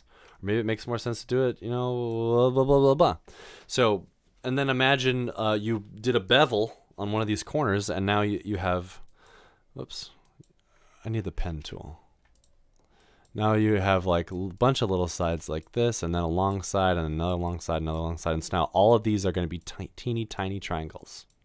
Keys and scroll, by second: 0.0 ctrl+z, 11.5 ctrl+z.